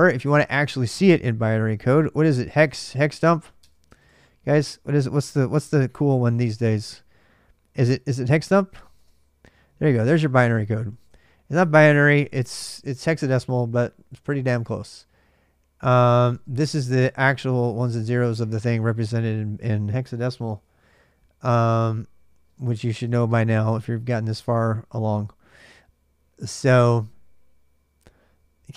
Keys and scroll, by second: 1.9-3.2 typing, 3.4 Tab, 3.7 Tab, 5.2 d, 5.4 Tab, 8.1 h, 8.3 Tab, 8.8 Return, 9.6-11.4 typing, 11.8 Return, 16.1 space, 17.3 space, 24.6 typing.